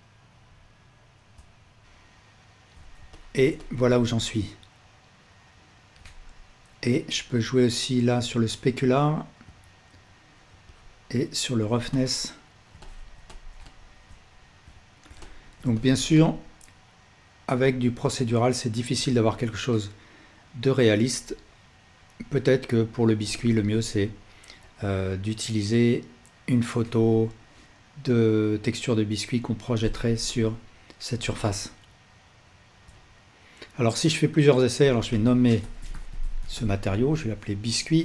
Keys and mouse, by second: 14.6 ctrl+s, 21.8-23.2 drag, 32.8-38.0 alt+shift+drag.